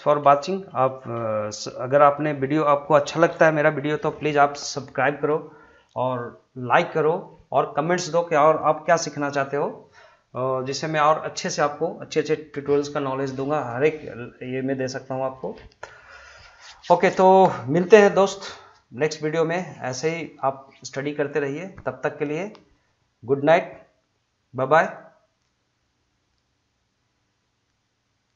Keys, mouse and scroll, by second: 0.4 shift+middle click, 0.8 middle click, 1.3 shift+middle click.